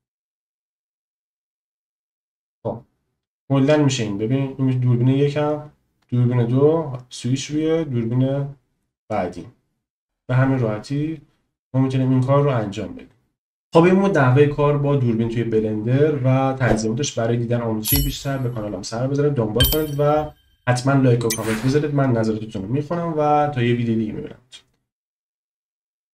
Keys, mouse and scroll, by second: 1.4 click, 2.0-10.0 drag, 11.4 click, 11.5-12.3 middle drag, 12.3-13.3 drag, 13.3 space, 15.7-20.5 middle drag, 20.5 space, 25.2 scroll up 1.